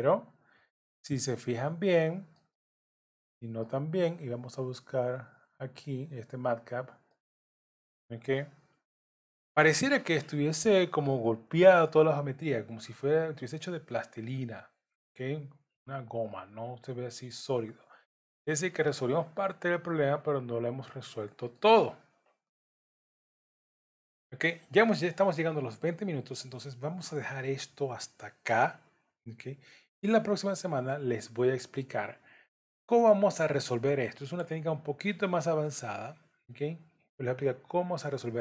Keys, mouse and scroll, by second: 2.5 middle click, 4.9 click, 7.1 middle click, 16.2 middle click, 21.9 scroll down 2, 22.5 middle click, 36.2-36.8 scroll up 1.